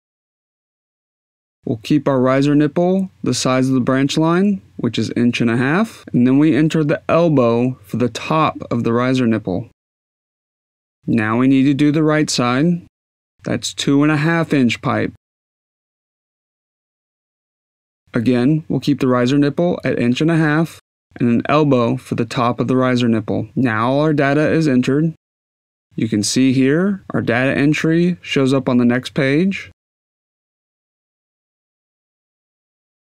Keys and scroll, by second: 1.2 4, 1.6 Tab, 3.6-5.0 typing, 5.6 Tab, 9.7 e, 17.9-21.9 typing, 19.1 Tab.